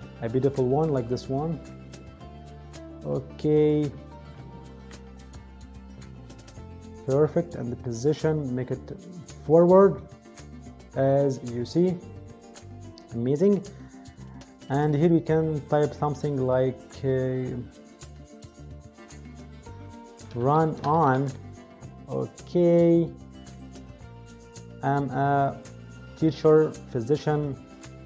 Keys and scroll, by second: 19.9-21.3 typing.